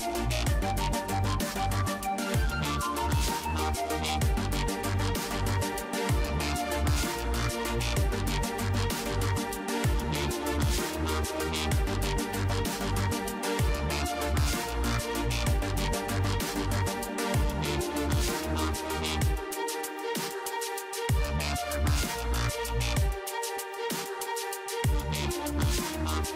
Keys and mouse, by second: 1.4 b, 2.7 KP_3, 4.0-5.9 drag, 6.0 r, 7.1 ctrl+z, 9.0 ., 9.3 ,, 11.9 r, 13.2 ctrl+z, 14.1 ., 18.8 ctrl+z, 19.4 ctrl+z, 21.0 ctrl+z, 23.6 ctrl+z, 24.5 ctrl+z, 25.3 a.